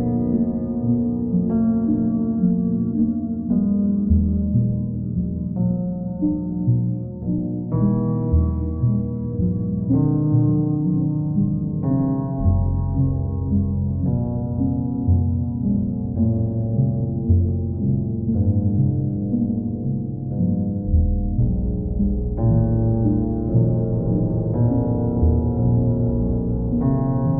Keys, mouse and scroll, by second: 1.2 ctrl+click, 2.2 click, 3.0 ctrl+click, 4.4 click, 7.0 click, 14.5 click, 14.9 shift+click, 15.6 alt+click, 17.4 click, 17.8 click, 18.8 click, 19.4 alt+click, 19.5 alt+click, 20.8 click, 21.3 shift+click, 21.9 alt+click, 23.1 ctrl+click, 24.4 ctrl+click, 25.4 ctrl+click, 26.2 click, 26.6 shift+click.